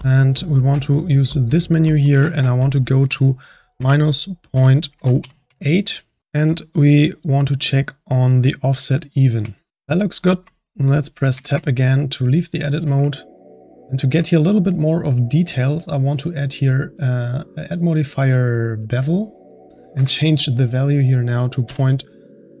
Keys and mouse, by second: 1.3-5.5 drag, 8.9-9.7 drag, 9.7-11.3 middle drag, 11.3 Tab, 11.7-16.3 middle drag, 16.4 click, 18.9-22.6 drag.